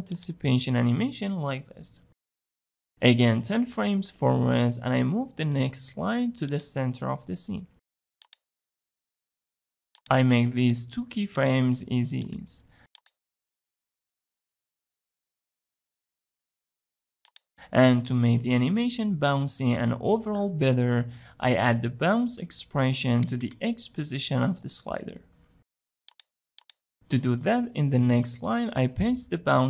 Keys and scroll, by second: 3.2 shift+Page_Down, 28.8 ctrl+v.